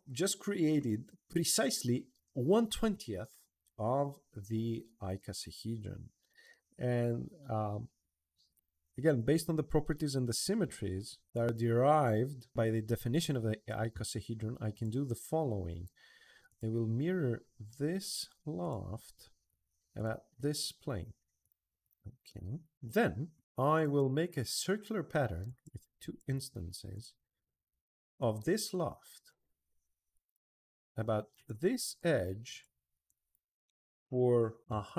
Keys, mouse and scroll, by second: 6.1-10.0 middle drag, 10.4 middle click, 11.1 middle drag, 14.5 click, 15.2 middle click, 16.3 click, 18.4 click, 19.7 click, 21.2 click, 21.6 click, 22.0-23.1 middle drag, 23.5 click, 25.2 drag, 25.8 click, 26.1 2, 26.7 click, 28.0 click, 30.0 click, 31.1 click, 32.3 click, 32.8 click.